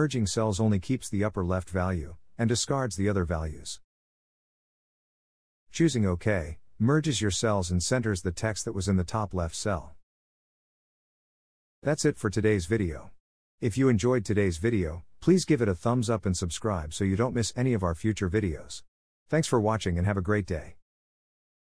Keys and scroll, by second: 7.0 Return.